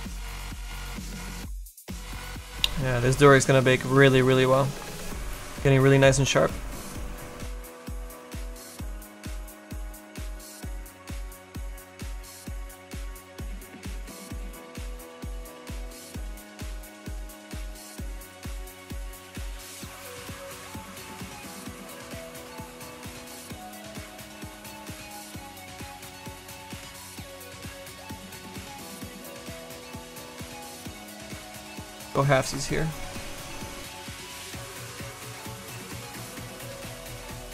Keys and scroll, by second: 22.7 s, 24.9 ctrl+z, 25.5 ctrl+z, 30.2 s, 33.8 s.